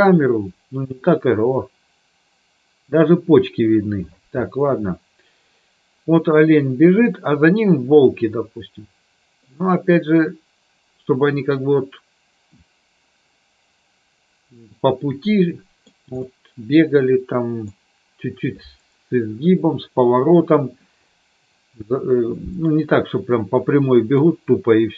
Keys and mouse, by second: 9.6-16.1 middle drag, 16.3-17.8 middle drag, 23.5-24.3 middle drag.